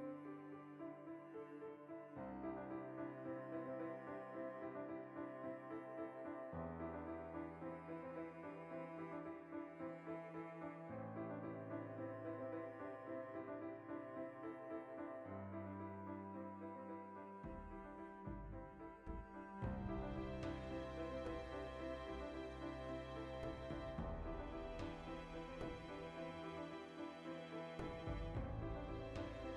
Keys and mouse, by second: 3.7 middle click, 5.4 2, 5.7 alt+right click, 5.9-8.4 ctrl+shift+middle drag, 8.4 alt+q, 8.6-9.8 shift+middle drag, 9.8-11.6 alt+shift+right drag, 11.6 a, 12.3-14.4 alt+right drag, 14.4 ctrl+b, 17.4 shift+click, 18.2 alt+e, 19.1 click, 19.9-22.6 middle drag, 22.6 shift+click, 22.7-29.5 ctrl+middle drag, 25.1 Tab, 26.1 Tab, 27.1 ctrl+KP_Add.